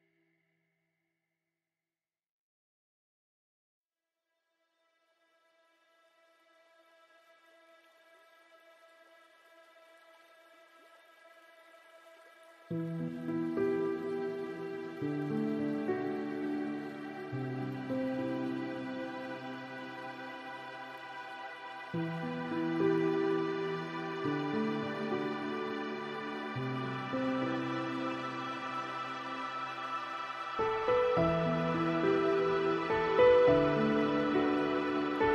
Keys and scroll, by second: 11.9 ctrl+alt+e.